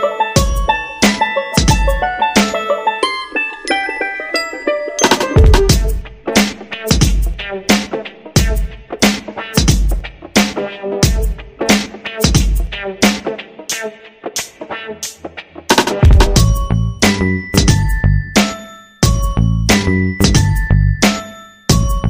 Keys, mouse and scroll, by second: 3.9 shift+click, 6.8-8.9 drag, 14.6 shift+click, 17.5 click, 19.7 shift+click.